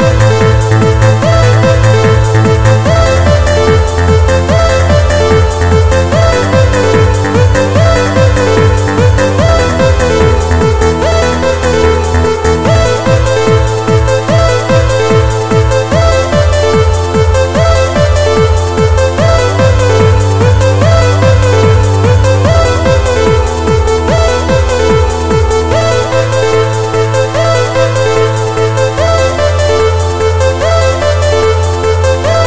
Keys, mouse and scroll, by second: 1.6 z, 2.0 middle click, 5.4 right click, 6.6 KP_7, 8.3 click, 11.0 g, 13.6 click, 14.5 KP_1, 15.8 middle click, 19.7-20.1 scroll down 3, 20.7 middle click, 20.7-21.8 scroll down 1, 22.4-23.0 scroll up 3, 23.0-23.6 scroll down 1, 23.6-24.1 scroll down 1, 24.4-24.8 scroll down 2.